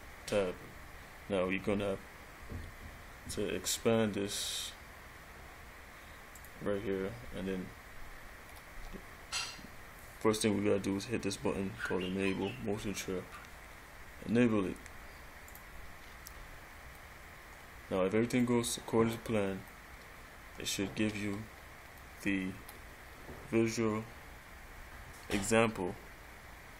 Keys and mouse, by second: 6.6 click, 8.9-11.2 middle drag, 15.7 click, 17.2-17.5 middle drag, 21.6 middle click, 24.5 middle click.